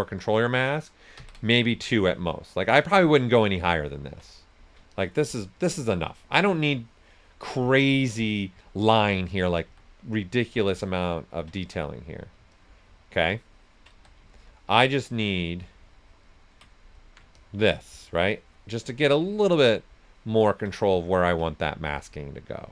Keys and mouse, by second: 1.1 ctrl+d, 1.9-4.2 ctrl+drag, 4.2 right click, 4.9-8.3 ctrl+drag, 8.3 right click, 9.6 s, 9.7 click, 10.2-11.5 ctrl+drag, 11.5 right click, 12.5-13.9 ctrl+drag, 13.9 ctrl+s, 14.0 click, 14.3-16.7 ctrl+drag, 16.7 right click, 17.3-20.7 ctrl+drag, 20.7 ctrl+right click, 21.4 ctrl+right click, 21.8-22.7 ctrl+drag.